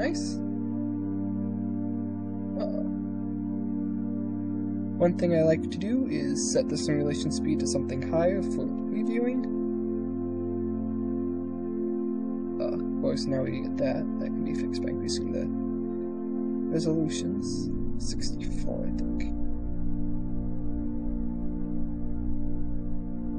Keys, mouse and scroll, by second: 0.2 KP_0, 1.9 click, 6.3-7.5 drag, 8.5 ctrl+r, 8.9 shift+space, 11.3 KP_0, 13.5 shift+space, 14.3-16.7 drag, 17.4-18.8 drag, 20.2 ctrl+r, 20.6 shift+space.